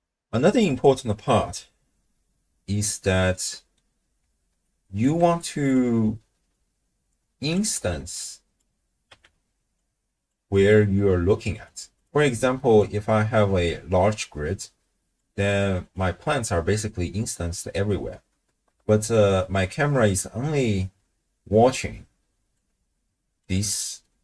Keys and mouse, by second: 3.3 middle click, 4.6 ctrl+click, 5.8-7.6 middle drag, 7.8 x, 8.2-8.6 drag, 9.1 x, 9.8 click, 11.6 click, 12.0 click, 12.8-15.2 drag, 15.8 click, 18.7-24.2 d, 19.0 click, 20.0-22.6 drag, 23.4-24.2 drag.